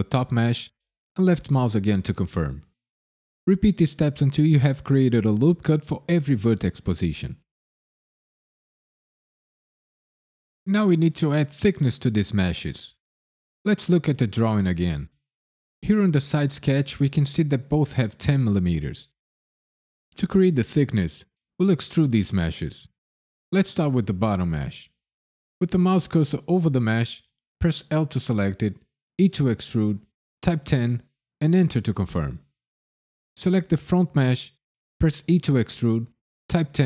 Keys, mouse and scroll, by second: 1.1 click, 3.4 ctrl+r, 3.6 click, 4.0 click, 4.4 ctrl+r, 4.5 click, 5.0 click, 5.4 ctrl+r, 5.8 click, 6.1 ctrl+r, 6.4 click, 6.7 ctrl+r, 7.0 click, 7.3 ctrl+r, 7.6 click, 7.9 ctrl+r, 8.1 click, 8.2 click, 8.5 click, 8.8 click, 9.0 ctrl+r, 9.3 click, 9.6 ctrl+r, 9.9 click, 10.1 ctrl+r, 10.4 click, 10.7 ctrl+r, 11.0 click, 11.2 ctrl+r, 11.5 click, 11.8 ctrl+r, 11.8 click, 12.1 click, 12.4 ctrl+r, 12.7 click, 12.9 ctrl+r, 13.0 click, 25.2 click, 27.9 l, 29.2 e, 30.5 KP_1, 30.8 KP_0, 31.4 KP_Enter, 33.3 click, 33.8 l, 35.2 e, 36.7 KP_1.